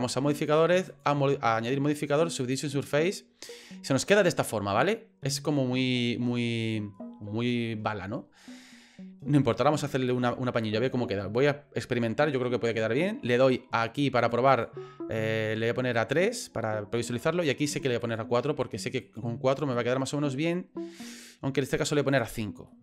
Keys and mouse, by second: 0.9-2.5 drag, 3.1-5.8 middle drag, 14.6-17.7 drag, 18.1 click, 19.0 click, 19.7 middle click, 20.5 middle click, 22.1 click, 22.7 middle click.